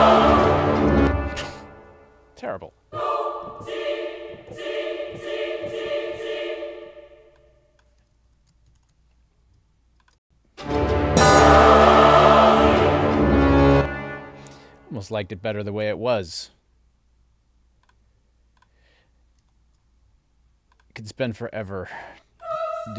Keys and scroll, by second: 1.0 space, 8.4 alt+shift+Up, 10.3 space, 13.7 space.